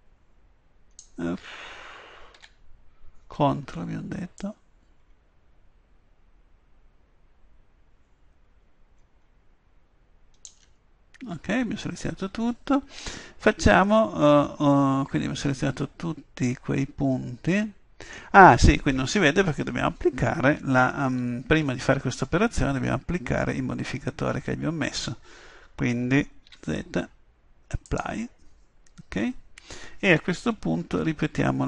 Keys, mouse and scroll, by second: 2.4 a, 4.4-9.8 drag, 13.9-15.8 middle drag, 18.2-21.2 middle drag, 21.2 Tab, 26.5 z, 30.9 KP_7.